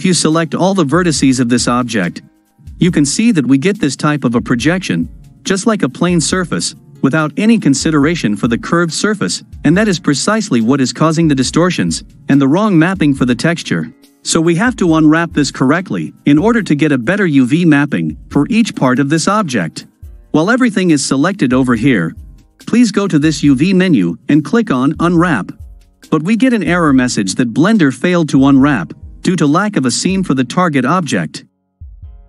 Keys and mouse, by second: 0.9 a, 23.3-25.4 drag.